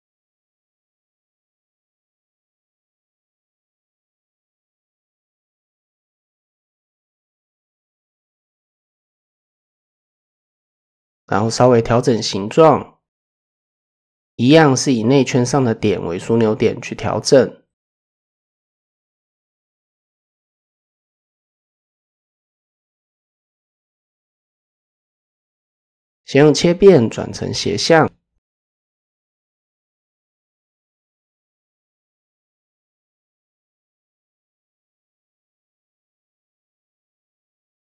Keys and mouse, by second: 1.1 ctrl+f, 2.3 middle click, 3.9 KP_1, 4.7 shift+middle drag, 5.6 middle click, 6.6 middle click, 7.7 middle click, 9.0 alt+click, 10.6 middle click, 11.0 middle click, 11.6 middle click, 13.2 shift+click, 14.1 KP_1, 14.2 middle click, 15.2 shift+click, 15.9 shift+click, 16.4-19.3 drag, 19.6 click, 20.3 click, 20.6 middle click, 21.0 middle drag, 21.7 shift+click, 22.7 KP_1, 24.0 shift+drag, 24.5-27.6 drag, 28.6 shift+middle click, 30.1 shift+middle click, 31.1-33.0 drag, 34.3 KP_7, 35.1 shift+middle click, 35.9 middle click, 36.6 shift+middle click.